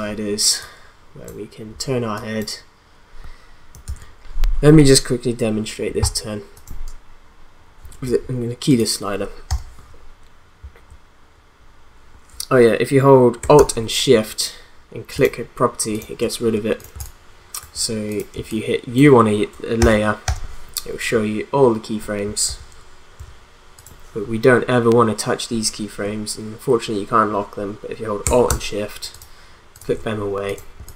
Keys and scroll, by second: 3.8 ctrl+z, 9.5 u, 16.9 space, 19.8 u, 22.5 u, 30.8 space.